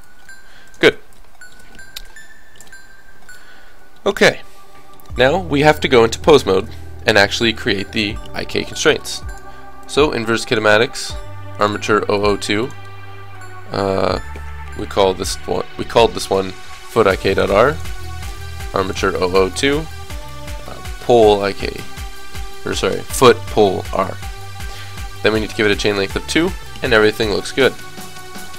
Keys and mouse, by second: 0.3 r, 0.9 ctrl+z, 5.7 click, 6.5-7.5 middle drag, 8.7 right click, 9.5-14.5 drag, 16.2 o, 17.7-21.2 drag, 25.7-26.7 drag, 26.5-27.7 middle drag.